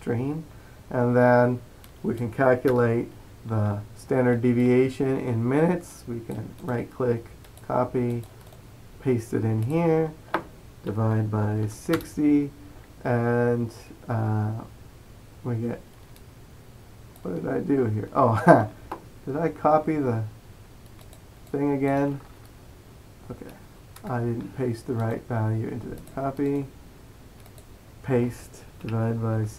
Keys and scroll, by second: 11.0-12.0 typing, 29.0-29.5 typing.